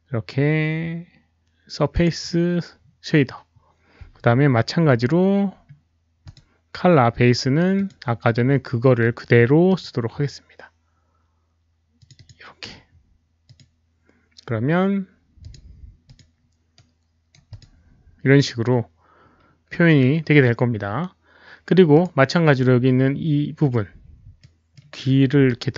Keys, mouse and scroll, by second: 1.9 click, 1.9 right click, 5.5 middle click, 6.2 click, 7.7 click, 9.6 click, 11.9 click, 12.1 click, 13.4 click, 15.4 click, 16.0 click, 16.8-17.3 right drag, 16.9 click, 17.5 click, 18.1-18.5 scroll up 1, 19.3-20.4 middle drag, 19.3 click, 19.3 right click, 21.9 click, 21.9 right click, 22.0 right click, 22.7 right click, 24.3 alt+middle click, 25.5 right click.